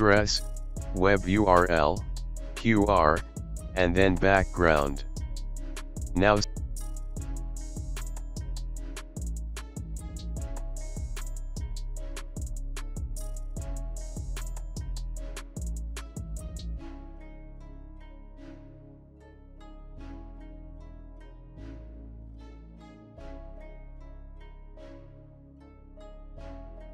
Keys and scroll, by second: 2.5-4.3 typing, 6.3-9.0 typing, 11.7-14.5 typing, 23.9-26.0 typing.